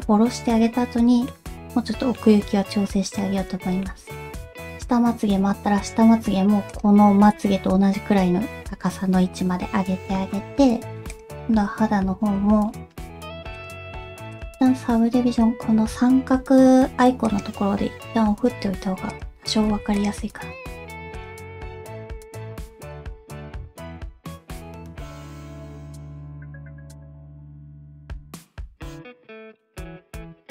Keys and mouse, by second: 2.1-3.2 middle drag, 3.8 middle click, 6.7 click, 11.1 click, 12.3 g, 14.3 click, 18.4 g, 19.7 alt+z, 20.0 click, 20.4 g, 21.7 g, 22.0 click, 22.7 click, 22.8 g, 23.3 click, 23.4 g, 24.0 click, 24.5 click, 24.6 g, 25.0 click, 25.0 g, 25.4 g, 26.7 click, 26.9 g, 27.5 alt+z, 27.7 alt+z, 27.9 click, 29.0 alt+z, 29.6 middle click.